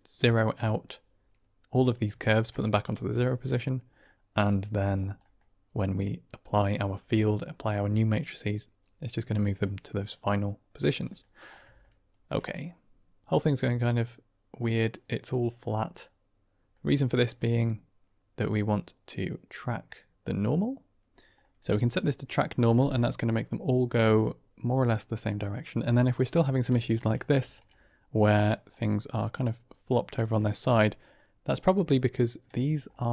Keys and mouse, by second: 3.9 middle click, 4.3 click, 5.2 middle click, 5.8 click, 9.5 middle click, 10.2 click, 11.7-12.2 shift+middle drag, 12.4 drag, 12.6-13.2 middle drag, 13.6-18.6 middle drag, 18.6-19.6 drag, 21.4 middle click, 26.5 middle click, 26.8 shift+middle click, 27.3 shift+middle click, 27.7 middle drag, 28.6-30.0 middle drag, 30.3 shift+middle drag, 31.3 click, 32.5 shift+click.